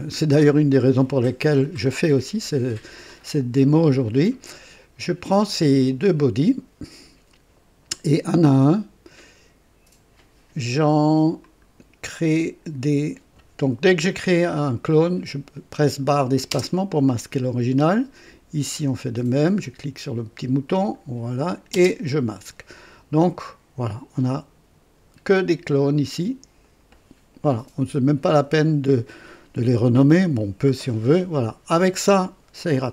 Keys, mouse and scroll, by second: 11.4 ctrl+click, 16.5 space, 18.2 click, 20.7 click, 21.7-22.2 typing, 26.1 click, 26.6 click.